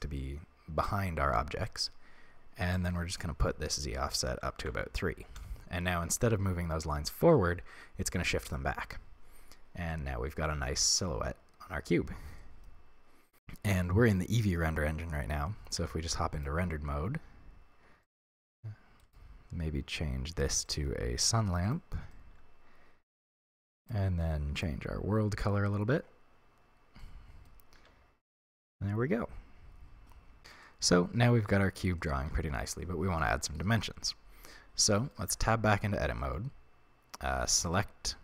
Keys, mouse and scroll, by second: 2.8-9.9 drag, 9.9-19.1 middle drag, 15.8 z, 18.3-18.6 scroll down 1, 19.1 right click, 20.7 click, 21.7 click, 22.1-23.9 middle drag, 23.9-24.7 drag, 27.0-37.7 middle drag, 27.8 z, 28.3-28.7 scroll up 1, 35.3 Tab, 35.9 a, 37.7 right click.